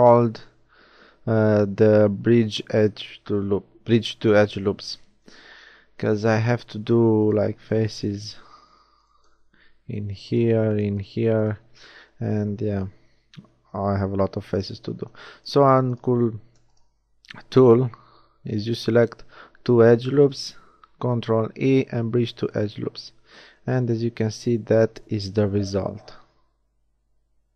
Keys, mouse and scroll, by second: 9.8 shift+f, 11.7 f, 13.4 ctrl+z, 13.6 ctrl+z, 14.0 ctrl+z, 14.2 ctrl+z, 14.4 ctrl+z, 14.6 ctrl+z, 19.9 ctrl+e, 23.2 a, 23.6 middle click.